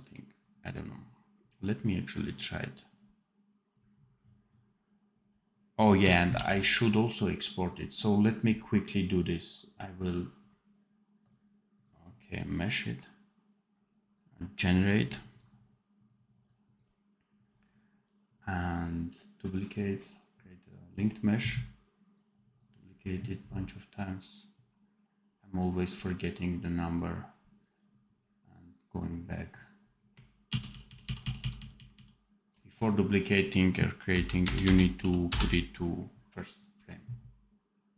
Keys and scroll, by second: 6.3 ctrl+s, 30.4 ctrl+z.